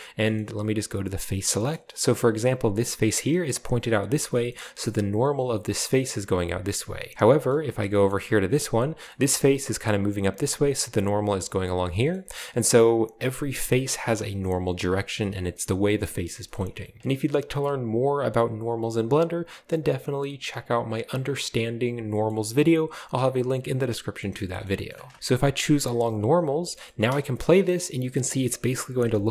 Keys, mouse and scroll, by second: 1.3-2.7 shift+drag, 2.8 right click, 4.5-6.8 middle drag, 6.8-7.4 scroll down 3, 7.1 shift+middle click, 7.8-8.8 scroll up 1, 8.8 right click, 11.6 scroll down 1, 11.9-13.0 shift+middle drag, 12.4-13.0 scroll up 1, 13.0 right click, 13.5 right click, 13.9 right click, 14.2 right click, 14.5 right click, 14.8 right click, 14.8-15.1 scroll down 1, 15.1 shift+middle click, 15.3 shift+middle click, 15.9-16.3 scroll up 2, 16.3 shift+middle click, 16.5 shift+middle click, 17.0-21.9 middle drag, 22.0-23.9 shift+middle drag, 23.9 scroll down 2, 24.1-25.2 shift+middle drag, 26.1 scroll down 1, 26.3 Tab, 26.9 space, 29.2-29.3 scroll down 1.